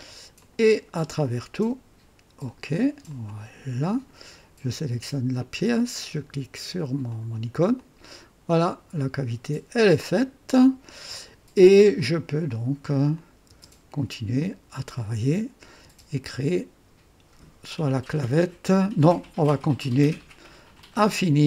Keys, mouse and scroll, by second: 0.4 click, 1.2 click, 2.4 click, 3.1-4.3 drag, 5.4 click, 7.1 click, 7.8-11.9 drag, 12.0 click, 13.2 click, 13.5 space, 14.4-15.5 drag, 15.8 typing, 19.2-19.9 drag, 20.8 click.